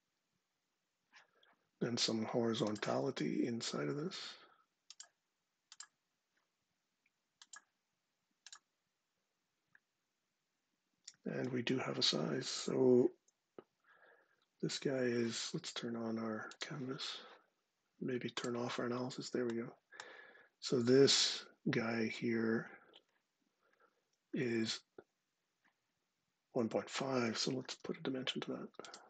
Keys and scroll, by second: 27.4 d.